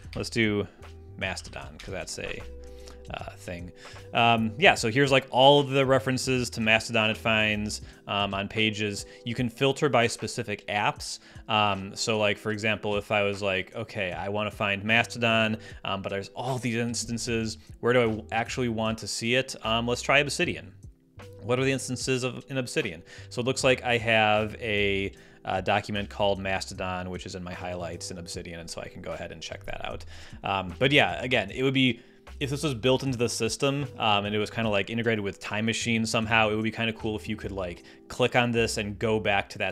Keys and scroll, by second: 0.0-1.9 typing.